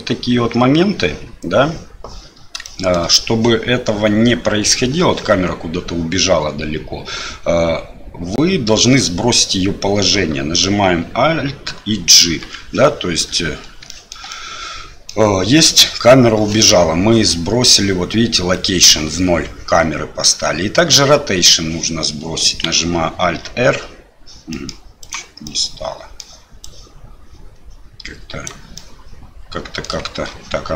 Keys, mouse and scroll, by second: 2.7 shift+middle click, 12.2 alt+g, 14.0 shift+middle click, 14.4-15.1 middle drag, 23.2 alt+r, 24.6 middle click, 25.0 right click, 25.5-26.2 middle drag, 26.6-28.5 right drag, 28.9-29.9 middle drag.